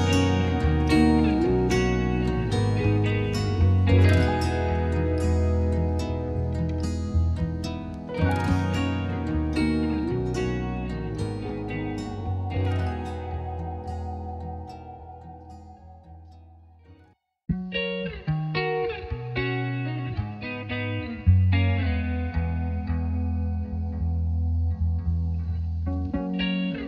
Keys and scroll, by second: 1.7 space.